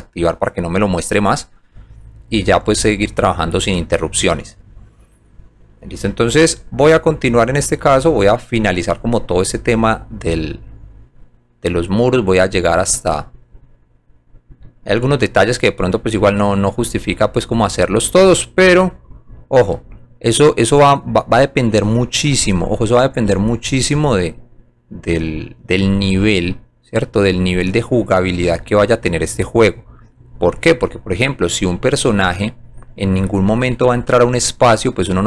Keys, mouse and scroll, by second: 0.2 click, 1.6 click, 8.5 scroll down 1, 11.0 scroll down 1, 12.4-13.5 drag, 14.8-16.1 alt+middle drag, 16.8 scroll up 1, 18.1 click, 19.9 scroll down 1, 20.4 alt+middle click, 26.0 click, 27.0 click, 27.8 alt+middle click, 29.4 alt+click, 31.4 alt+click, 31.9 alt+middle click, 32.4 alt+middle click, 32.9 alt+middle click, 33.4 alt+middle click, 33.9 alt+middle click, 33.9 scroll down 1, 34.4 alt+click.